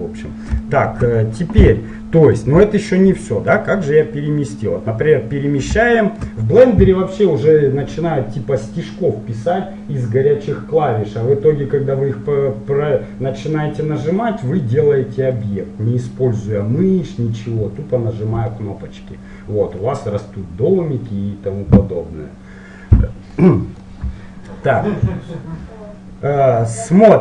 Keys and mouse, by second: 23.5-27.0 middle drag.